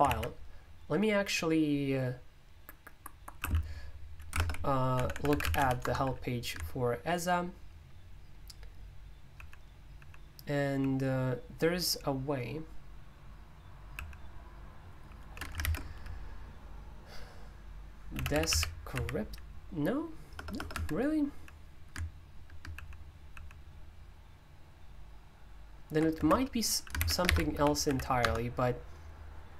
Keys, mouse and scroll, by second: 0.1 alt+d, 3.4-6.0 typing, 4.4 ctrl+w, 9.1-10.5 typing, 10.8 alt+k, 13.9 alt+k, 14.9 alt+j, 15.1 alt+j, 15.2 alt+j, 15.6 ctrl+b, 17.9-20.5 typing, 20.7 Escape, 22.7 alt+k, 23.3 alt+k, 26.2 Escape, 26.3-28.4 typing.